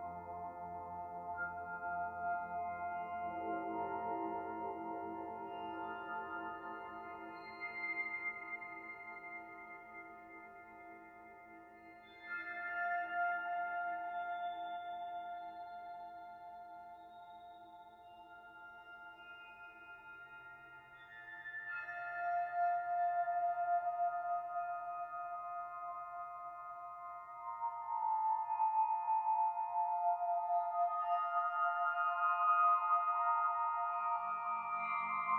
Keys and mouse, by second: 1.6-4.0 middle drag, 4.1 Tab, 4.9 click, 5.6-10.4 middle drag, 12.9 click, 13.3 right click, 14.9-15.4 drag, 15.4-20.5 middle drag, 21.0 click, 22.5-22.9 shift+middle drag, 24.0 Tab, 25.2 ctrl+r, 31.5 Tab, 33.1 ctrl+s.